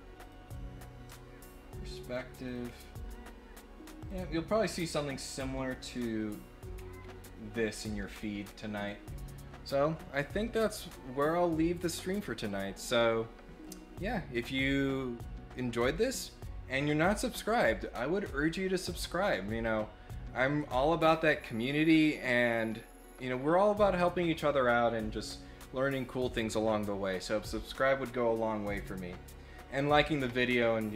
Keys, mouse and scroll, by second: 0.2 click, 1.4 click, 2.0 click, 2.4 click, 2.6 scroll down 1, 2.7-3.1 scroll up 1, 4.0 click, 5.1 click, 5.7 scroll up 1, 6.7 scroll down 2, 7.0 scroll up 2, 7.6 scroll up 2, 8.0 scroll down 2, 8.4 scroll up 4, 8.8 scroll down 2, 19.6 click.